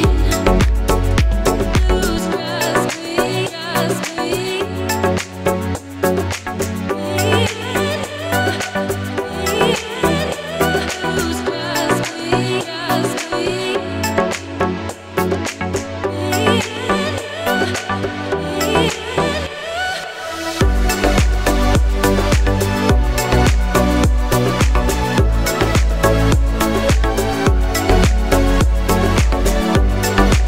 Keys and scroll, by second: 6.3 s, 9.2 g.